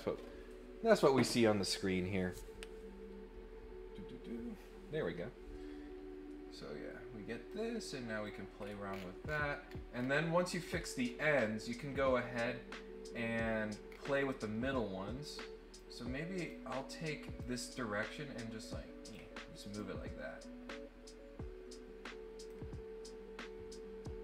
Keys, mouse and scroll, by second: 7.4 click, 8.6 scroll up 1, 8.8-10.0 scroll down 8, 10.4-11.1 scroll up 6, 13.8 scroll down 2, 14.1 scroll up 2, 15.7 click, 17.4-19.1 drag, 19.7-22.5 drag.